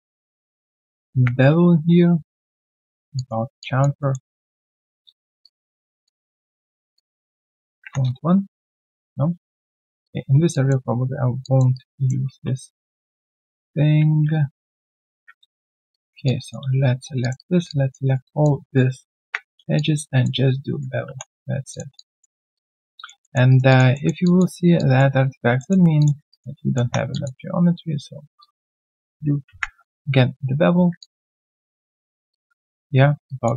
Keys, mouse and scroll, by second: 3.5 alt+click, 4.0 alt+middle click, 6.0 alt+click, 7.9 Return, 8.8 alt+click, 10.5 alt+click, 11.7 alt+right click, 11.9 alt+click, 12.3 ctrl+z, 14.6 ctrl+z, 14.7 ctrl+z, 15.7 shift+click, 15.9 shift+double click, 16.2 alt+double click, 17.6 alt+click, 18.0 alt+right click, 18.2 alt+click, 19.2 ctrl+b, 19.7 alt+click, 20.4 right click, 21.0 scroll, 21.9 alt+click, 22.3 alt+right click, 22.5 alt+click, 23.2 alt+middle click, 23.5 alt+right click, 23.7 alt+click, 23.9 alt+middle click, 24.2 alt+click, 25.5 alt+middle click, 26.3 alt+right click, 26.6 alt+middle click, 26.8 1, 27.1 alt+click, 27.4 right click, 27.8 right click, 28.5 double click, 31.0 alt+click, 31.3 alt+double click, 32.1 alt+right click, 32.3 alt+click.